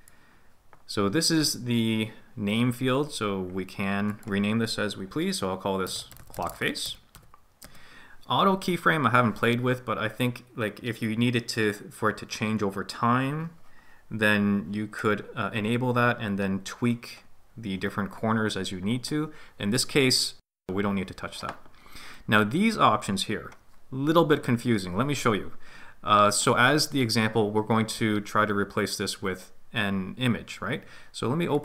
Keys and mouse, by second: 4.1-7.8 drag.